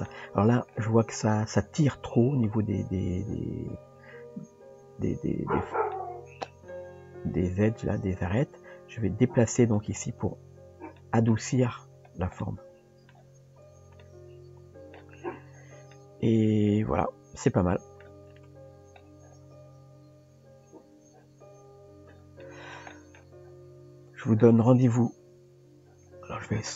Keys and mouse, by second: 4.5 Tab, 5.9 middle click, 7.0 g, 11.0 shift+middle click, 12.4 middle click, 13.3 Tab, 14.0-15.0 middle drag, 16.0 Tab, 16.0-18.0 middle drag, 18.5 Tab, 22.4-22.8 middle drag, 22.9 shift+middle drag, 24.1 click.